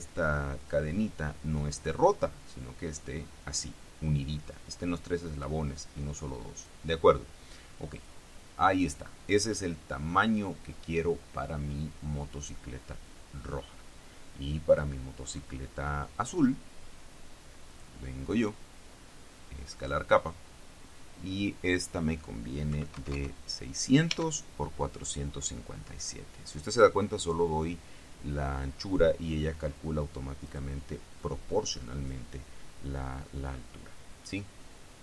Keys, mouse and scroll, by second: 0.7 click, 2.5 click, 5.5 click, 6.7 click, 8.1 click, 14.9 click, 17.9 click, 19.9 click, 22.9 KP_6, 23.1 KP_0, 24.3 Tab, 30.6 click.